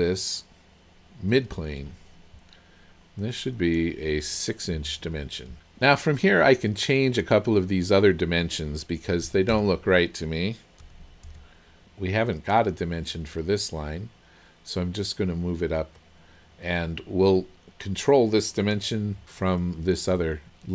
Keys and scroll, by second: 4.8 KP_6, 5.5 Return, 9.3 KP_1, 10.9 KP_0, 11.3 Return.